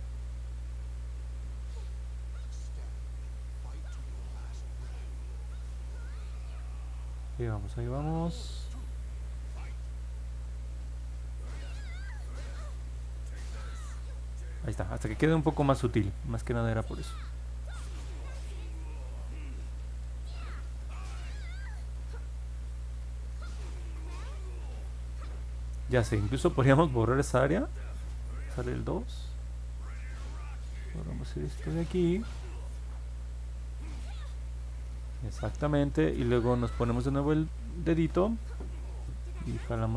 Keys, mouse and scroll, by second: 0.3 click, 0.5 click, 0.9 click, 1.1 click, 1.5 click, 1.8 click, 2.1 click, 2.4 click, 3.9 click, 4.3 click, 4.6 click, 4.8 click, 5.1 click, 5.4 click, 5.7 click, 6.0 click, 6.2 click, 6.5 click, 6.8 click, 7.1 click, 7.4 click, 7.7 click, 8.0 click, 8.3 click, 8.7 click, 9.0 click, 9.4 click, 9.7 click, 10.0 click, 10.4 click, 10.7 click, 11.0 click, 11.3 click, 11.6 click, 11.8 click, 12.1 click, 12.4 click, 12.7 click, 13.0 click, 17.1 click, 17.7 click, 18.0 click, 18.5 click, 18.8 click, 19.4 click, 19.6 click, 19.9 click, 21.9 click, 22.3 click, 22.7 click, 23.1 click, 23.4 click, 23.7 click, 24.0 click, 24.3 click, 24.6 click, 24.9 click, 25.1 click, 28.6 2, 30.6-33.7 drag.